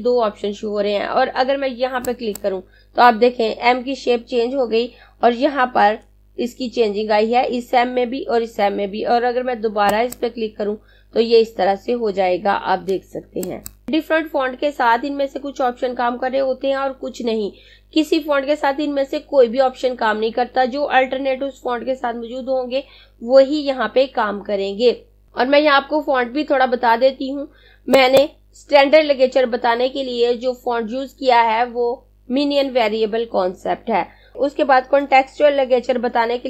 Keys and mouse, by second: 1.4 click, 9.2 click, 12.5 click, 27.9 click, 34.3 click.